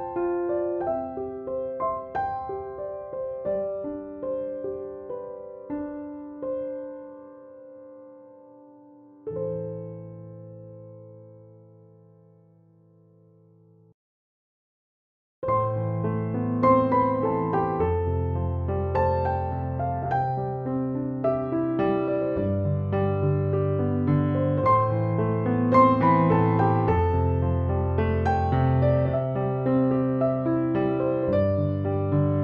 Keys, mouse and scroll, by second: 0.5-8.3 drag, 10.8-14.3 typing, 11.0 click, 14.5-16.3 drag, 16.5 ctrl+-, 17.3 space, 17.6-18.3 click, 18.5-20.9 drag, 20.8 space, 21.2 click, 21.3-21.8 space, 22.2 ctrl+=, 22.4 click, 22.7 ctrl+-, 23.3 shift+l, 23.8 click, 30.1 shift+F6, 31.9 alt+t.